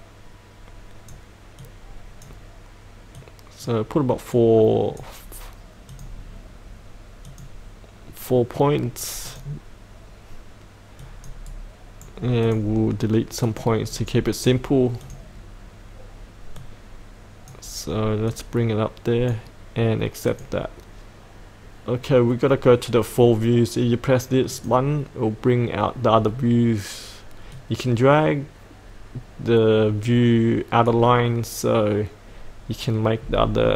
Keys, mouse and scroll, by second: 11.4 right click, 12.4 click, 13.9 right click, 15.0-31.9 drag, 33.2-33.7 scroll down 1.